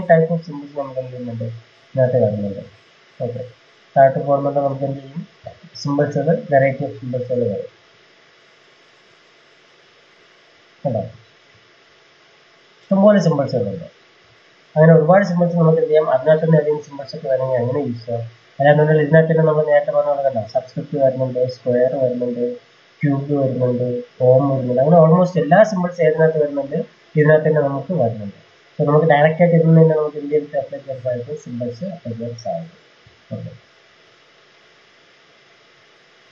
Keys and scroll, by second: 34.1 ctrl+z.